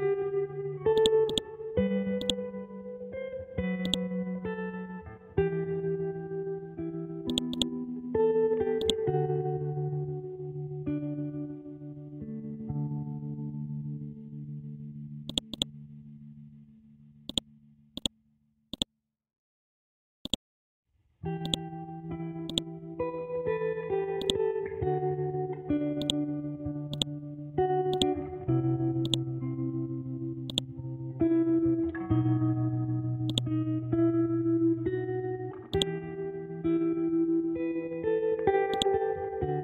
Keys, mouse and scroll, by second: 4.7 ctrl+z, 7.3 click, 10.3 shift+Tab, 13.5 scroll down 1, 15.3 click, 16.2 scroll up 1, 17.3-22.4 drag, 22.7 scroll down 1, 24.2-32.2 drag, 32.2 scroll up 1, 33.3 click, 33.9 scroll up 1, 35.7 right click, 38.7-39.6 drag.